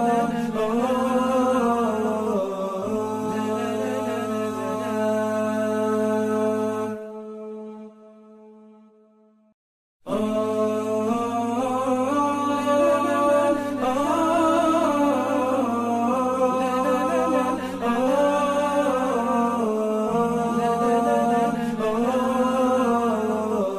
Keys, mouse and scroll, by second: 0.9 1, 8.9-9.4 typing, 10.5 typing, 15.4 typing.